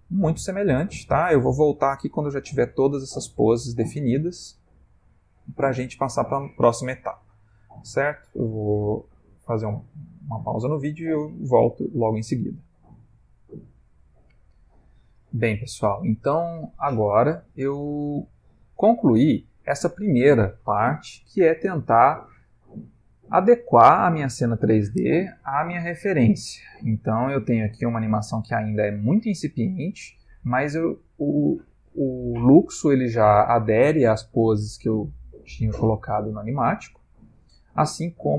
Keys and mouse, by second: 1.0 Right, 1.5 Left, 2.9 Left, 3.6 Right, 17.8 click, 19.7 space.